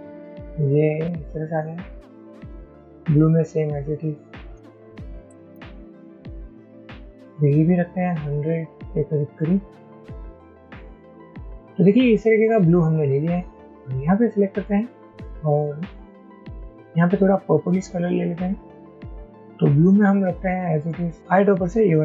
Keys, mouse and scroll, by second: 4.7 shift+Down, 4.8 shift+Down, 5.1 shift+Down, 5.6 Down, 7.9 shift+Up, 8.1 shift+Up, 8.8 shift+Up, 9.2 shift+Up, 9.4 shift+Up, 9.5 shift+Up, 9.7 shift+Up, 9.9 shift+Up, 10.4 Down.